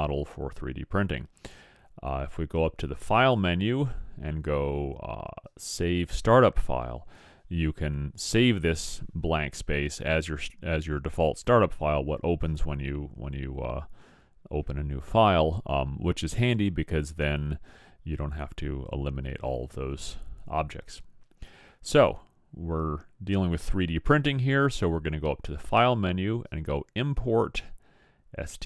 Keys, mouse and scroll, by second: 3.2-5.1 drag, 23.9 click.